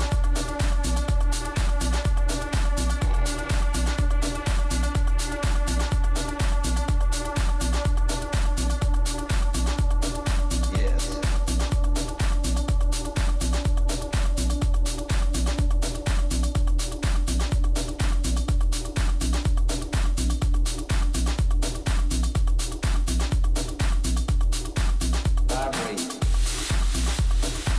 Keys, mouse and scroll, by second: 2.4-4.8 drag, 6.4-8.2 drag, 13.9-17.0 middle drag, 17.5 middle click, 19.0-20.1 middle drag, 20.1 a, 22.4-24.2 right drag, 24.0-25.9 drag.